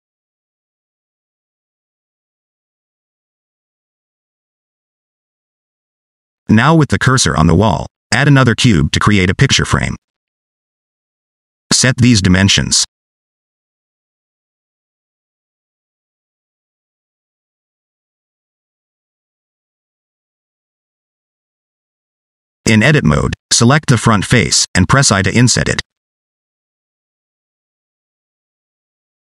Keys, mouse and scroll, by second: 6.2 scroll down 2, 6.7 shift+right click, 7.5 shift+a, 9.9 n, 10.9 click, 11.7 click, 12.7 click, 14.4 click, 16.6 shift+middle click, 17.3 middle click, 17.7 scroll up 3, 18.0 middle click, 19.0 click, 21.5 middle click, 23.0 Tab, 23.8 3, 25.5 click, 26.1 shift+middle click, 26.4 middle click.